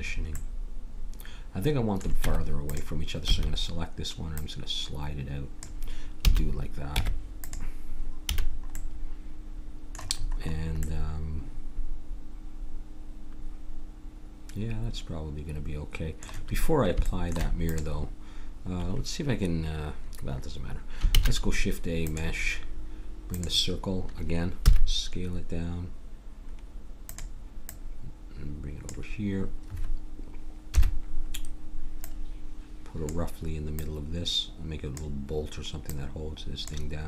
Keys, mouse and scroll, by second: 2.2 Tab, 3.2 a, 4.4-6.1 drag, 6.2 a, 6.9 Tab, 8.3 a, 8.8 middle click, 11.5-12.9 middle drag, 17.0 middle click, 17.6-19.3 drag, 21.1 shift+a, 24.6 s, 27.6-29.4 drag, 30.7 KP_7, 32.0-34.1 drag.